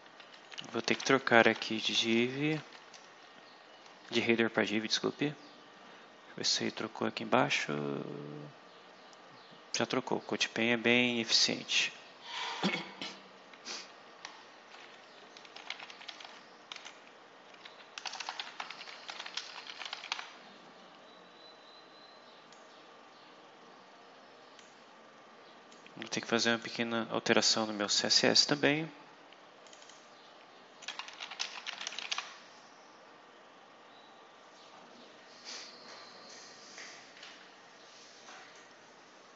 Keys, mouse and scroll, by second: 0.1 shift+Left, 0.5-1.9 typing, 4.7-6.1 scroll down 8, 6.6-7.1 scroll down 4, 7.4 scroll up 2, 8.1 scroll up 2, 10.2-11.5 scroll up 2, 15.2-20.5 typing, 22.4-24.7 drag, 25.6-26.7 drag, 27.8 scroll down 2, 28.6-28.9 scroll down 2, 29.6 click, 30.8-32.5 typing.